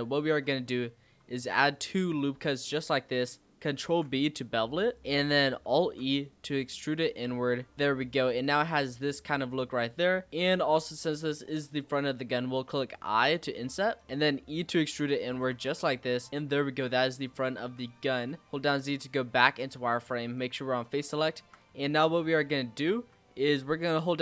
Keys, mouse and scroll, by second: 0.2 ctrl+r, 2.1-2.4 scroll up 2, 3.8 ctrl+b, 5.0 scroll up 1, 5.1 middle click, 5.8 alt+e, 7.7 z, 8.2 click, 8.6 click, 8.8 scroll down 4, 9.1-10.8 middle drag, 10.8 click, 14.0 middle click, 14.3 e, 15.3 Tab, 15.5 scroll down 4, 15.7-16.5 middle drag, 16.5-17.2 scroll up 2, 17.2 click, 17.6 Tab, 17.9-18.3 scroll up 2, 18.3 z, 18.7-20.3 scroll up 3, 20.3 click, 21.1 shift+middle click, 21.6-22.2 scroll up 3, 22.2-24.2 shift+middle drag.